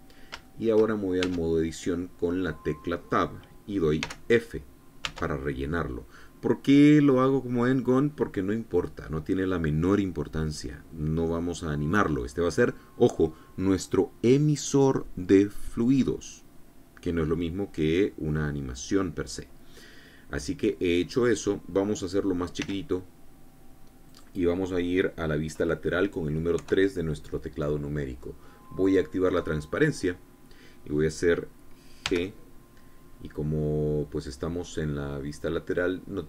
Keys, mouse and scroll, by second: 0.0-0.4 scroll up 2, 0.9 shift+middle click, 1.6 shift+Tab, 4.5 f, 5.5 Tab, 20.2-21.2 drag, 21.4 click, 23.1 s, 24.5 click, 27.0 KP_3, 29.3 click, 30.6-31.1 scroll up 1, 32.5 g.